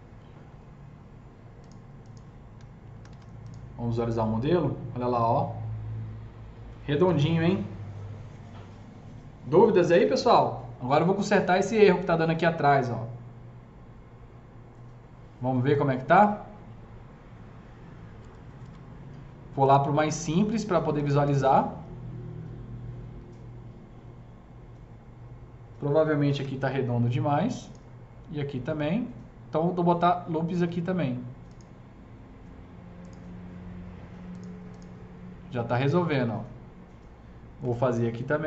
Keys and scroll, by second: 3.0 F4, 7.0 ctrl+s, 18.2 F3, 18.6 F3, 26.3 KP_0, 37.6 KP_0.